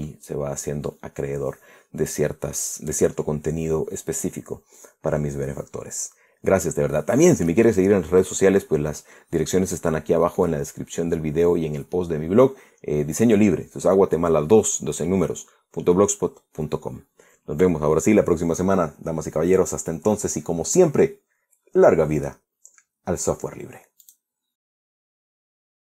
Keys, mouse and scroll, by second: 24.7 click, 25.8 click.